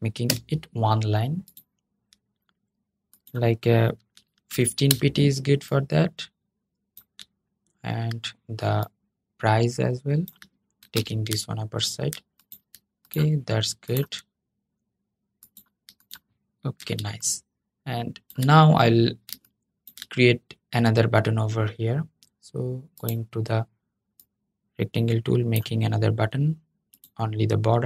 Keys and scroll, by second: 10.7 super+}.